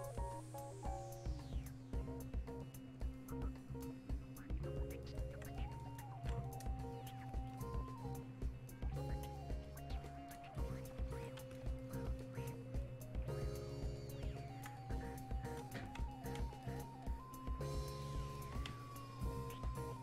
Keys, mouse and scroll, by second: 6.5 click, 7.5-16.7 ctrl+drag, 19.6-20.0 alt+drag.